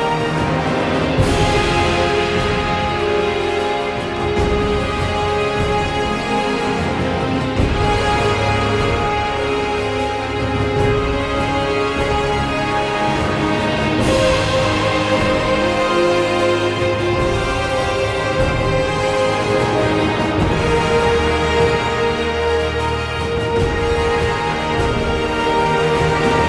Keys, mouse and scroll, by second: 4.2 ctrl+z, 5.9 ctrl+z, 6.6 ctrl+z, 10.5 ctrl+z, 15.8 ctrl+z, 23.0 ctrl+z, 24.3 ctrl+z, 25.4 ctrl+z.